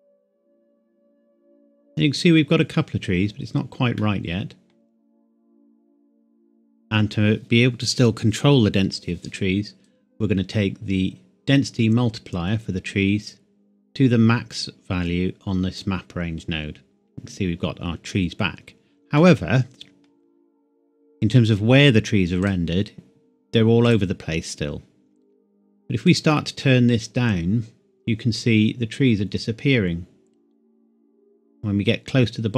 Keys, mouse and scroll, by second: 4.0 middle click, 5.2-7.2 scroll down 1, 9.9 click, 19.2 middle click, 22.4 click.